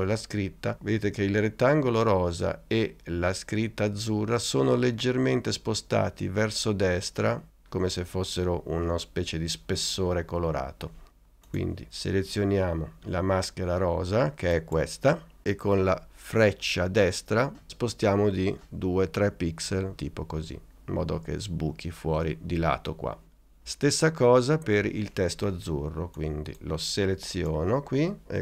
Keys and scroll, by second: 17.6 Right, 18.5 Right, 19.7 Left, 20.2 Right.